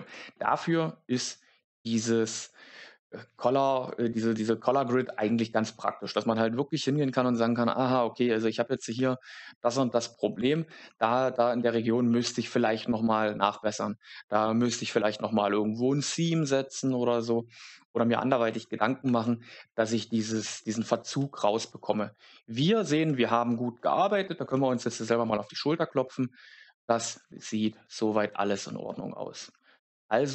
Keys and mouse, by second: 3.2 ctrl+z, 8.7 a, 8.8 a, 10.9 middle click, 13.4 middle click, 23.0 shift+middle click.